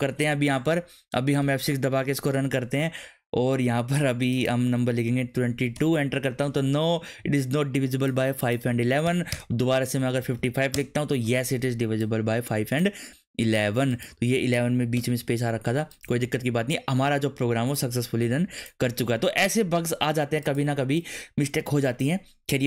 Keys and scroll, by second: 5.2 2, 5.5 2, 5.7 Return, 9.2 Up, 9.3 Return, 10.2 5, 10.4 5, 10.7 Return, 14.9 BackSpace, 16.2 ctrl+s.